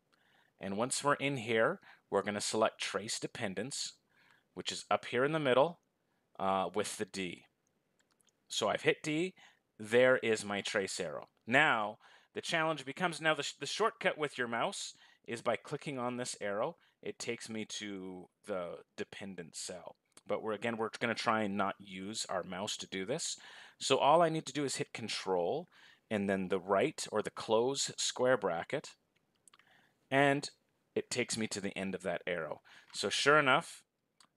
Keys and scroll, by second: 26.3 ctrl+].